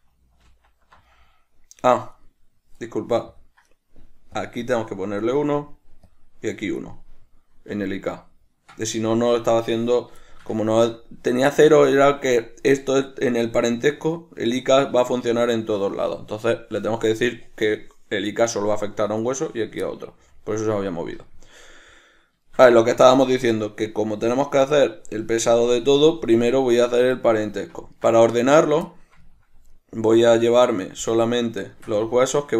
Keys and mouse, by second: 2.3 right click, 3.5 click, 4.5-5.3 drag, 5.3 right click, 6.2-7.1 drag, 7.1-18.6 middle drag, 18.6 right click, 19.3 right click, 20.0-28.7 middle drag, 28.7 right click, 29.0-32.5 middle drag.